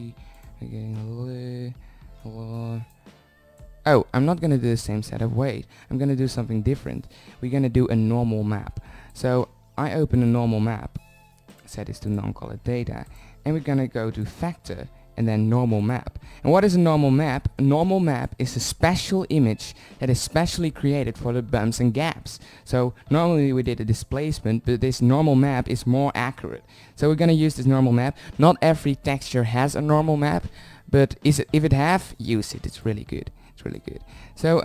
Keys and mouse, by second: 1.7 shift+d, 20.0-22.3 drag, 24.8-28.0 drag, 34.0-34.6 drag.